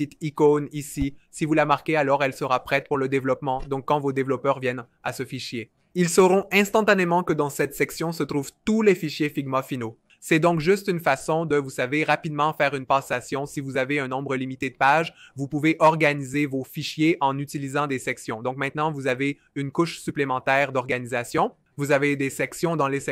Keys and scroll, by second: 12.1 BackSpace.